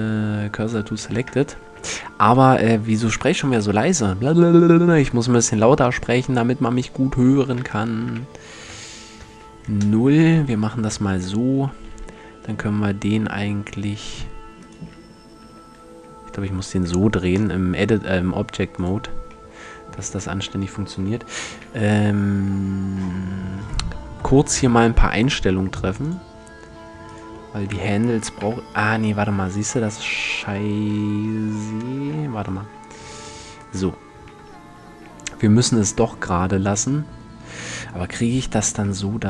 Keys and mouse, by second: 0.6 a, 1.0 Tab, 1.5 shift+a, 7.2 r, 9.8 Tab, 10.1 middle click, 11.7 r, 14.3 right click, 15.0 Tab, 15.5 r, 20.0 Tab, 21.2 n, 28.0 KP_7, 28.9 middle click, 30.9 Tab, 31.6-33.1 middle drag, 32.3 ctrl+z, 32.7 ctrl+z, 33.1 ctrl+z, 34.0 Tab.